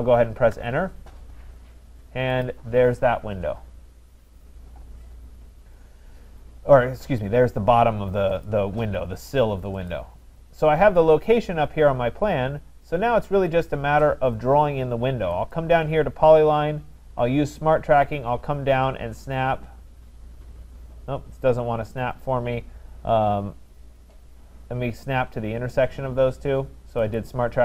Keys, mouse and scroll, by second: 0.5 Return, 2.4-7.5 drag, 8.4-9.7 drag, 15.5 click, 27.2 click.